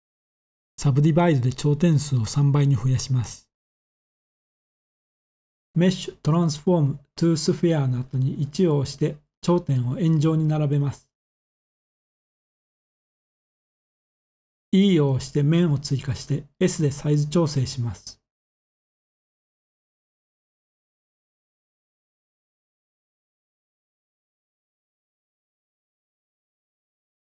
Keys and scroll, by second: 8.1 1, 11.2 s, 13.5-14.6 typing, 16.0-16.7 typing, 20.4 e, 23.0-23.8 typing.